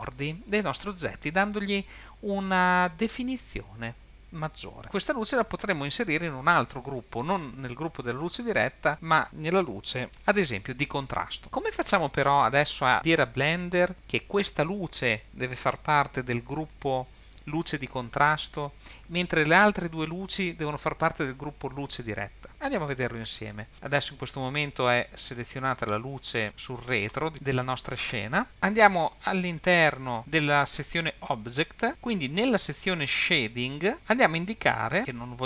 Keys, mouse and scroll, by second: 8.9 click, 10.1-13.9 drag, 25.7 click, 31.9 click, 33.9 click.